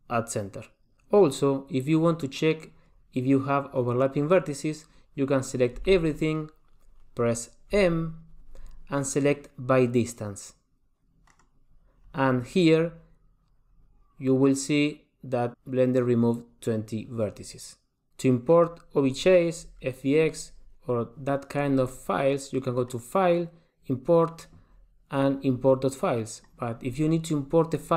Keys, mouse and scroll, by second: 1.1 click, 6.0 a, 7.9 m, 22.9 click.